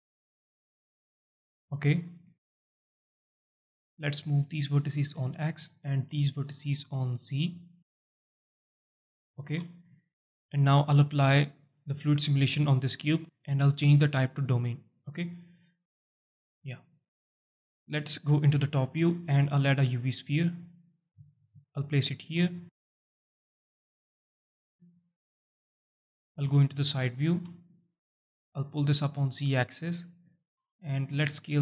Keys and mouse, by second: 1.6 alt+shift+middle click, 2.3 alt+shift+middle click, 3.0 click, 4.1 click, 5.1 click, 6.8-8.0 drag, 8.7 click, 9.1 alt+shift+middle click, 9.6 Tab, 9.9 alt+shift+middle drag, 11.6 click, 13.3-15.0 drag, 16.5 click, 16.9 alt+middle drag, 17.6 alt+middle drag, 18.4 KP_7, 18.9 shift+a, 21.2 g, 22.0 click, 22.8 s, 23.1 click, 24.1 alt+shift+drag, 24.8 g, 25.5 click, 26.3 KP_1, 27.1 alt+shift+drag, 27.7 alt+shift+drag, 29.0-29.7 drag, 30.3 alt+shift+middle drag, 30.8 alt+shift+middle drag, 31.3 s, 31.5 z.